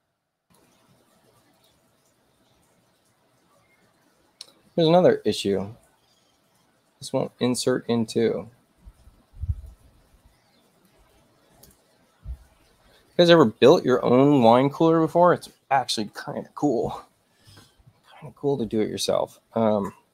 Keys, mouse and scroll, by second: 1.5 click, 8.4 middle click, 8.4-8.8 scroll up 2, 9.6-10.9 drag.